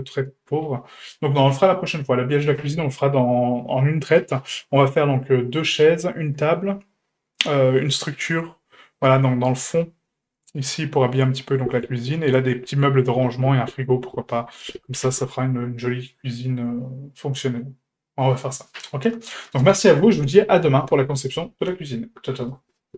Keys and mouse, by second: 0.3-1.5 middle drag, 1.7 shift+middle drag, 15.5-18.6 middle drag, 19.1-19.4 middle drag.